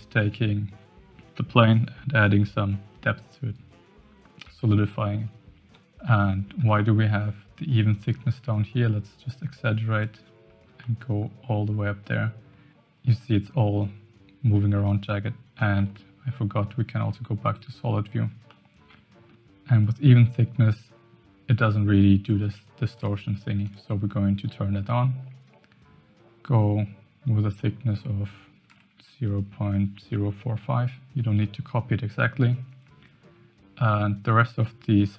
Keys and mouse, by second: 6.8 shift+middle click, 9.1-10.1 drag, 10.9 middle click, 13.2-14.6 middle drag, 15.7 z, 18.5-19.3 middle drag, 19.8 click, 22.4 click, 22.9 click, 23.3 click, 23.6 click, 24.9-28.6 shift+drag, 31.4-32.3 shift+middle drag.